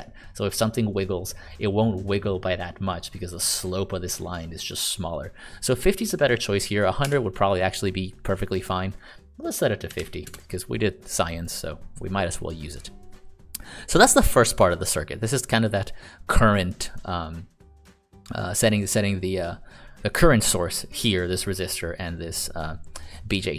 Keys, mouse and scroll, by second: 7.1 Escape, 9.6-10.5 typing, 11.4 click.